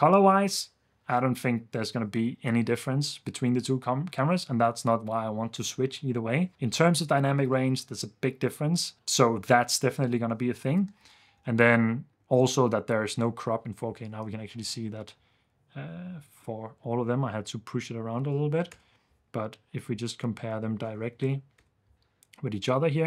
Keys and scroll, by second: 10.8 ⟲, 11.0 ⟲, 11.6 super+s, 14.3 1, 18.4 0, 18.7 Return, 21.0 0, 21.5 Return.